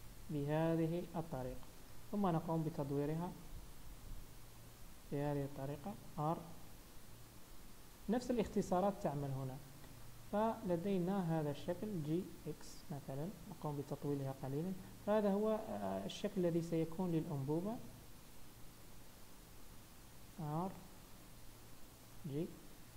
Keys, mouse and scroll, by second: 2.5 r, 6.7 g, 8.9 Tab, 9.9 scroll up 2, 10.3 shift+middle click, 10.7 Tab, 11.2 click, 11.6-12.7 scroll down 2, 12.1 g, 14.5 Tab, 16.4 Tab, 16.8 click, 17.2-17.8 scroll down 2, 17.9 g, 19.8 r, 21.4 g, 22.4 Tab, 22.7 scroll down 2.